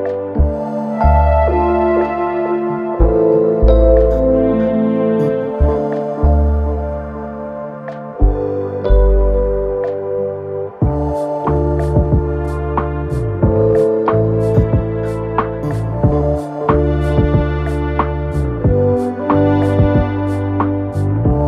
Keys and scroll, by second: 2.2 4, 3.9 3, 4.9 4, 5.3 3, 5.6 ], 6.2 ], 8.2 4, 12.8 ..